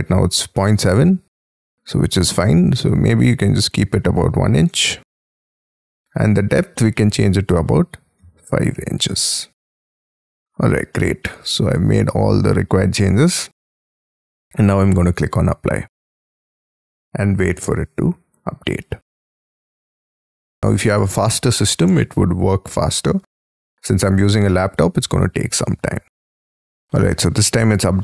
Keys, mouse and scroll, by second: 1.2 scroll down 3, 4.2 1, 5.1 shift+', 5.4 Tab, 8.2 5, 8.8 shift+', 9.2 Tab, 10.2 middle click, 10.7-18.9 scroll down 2, 26.9-28.0 scroll down 50.